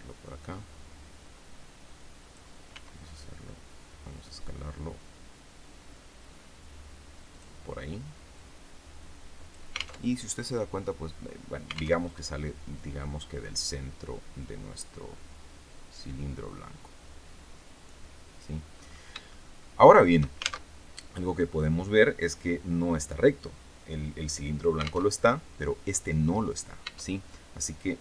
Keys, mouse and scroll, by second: 0.3-2.4 drag, 2.6 s, 7.2 click, 8.2-9.6 drag, 9.9 alt+Tab, 11.9 alt+Tab, 13.5-18.5 drag, 18.7-19.2 scroll up 3, 19.2-20.3 shift+middle drag, 20.6 alt+shift+Tab, 25.0 alt+Tab, 26.4 right click, 26.8 Tab.